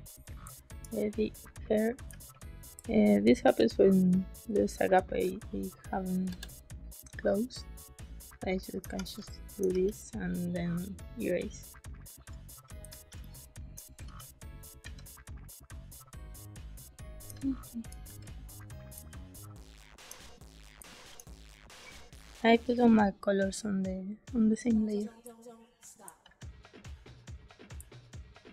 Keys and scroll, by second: 0.4 space, 2.0 space, 3.3 z, 5.0 b, 6.2 g, 8.7 space, 9.6 e, 12.6 a, 12.7 space, 14.0 g, 14.7 b, 17.2 space, 18.0 g, 18.9 space, 20.7 space, 25.2 space, 26.1 b, 27.7 space.